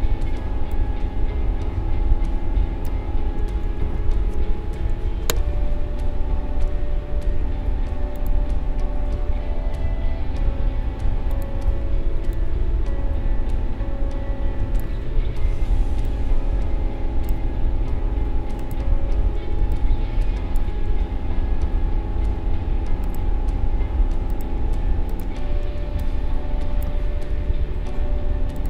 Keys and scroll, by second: 3.8 ctrl+z, 25.8 space.